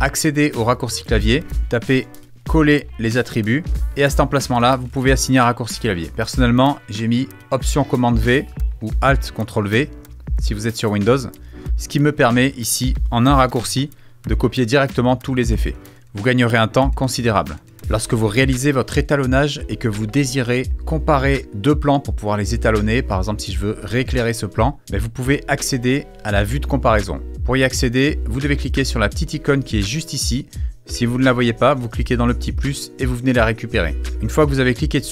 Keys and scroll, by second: 1.3-3.0 typing, 13.7 alt+super+v.